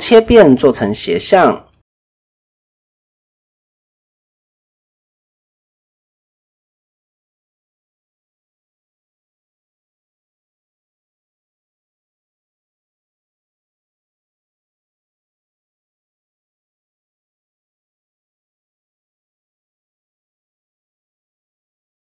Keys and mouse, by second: 0.0-3.3 drag, 4.2 shift+middle click, 4.7 s, 5.4 s, 6.8 s, 8.6 middle click, 9.7 KP_1, 10.6-12.1 drag, 12.4 s, 14.5 middle click, 16.2-18.5 middle drag, 18.9 KP_7, 21.1-22.1 drag.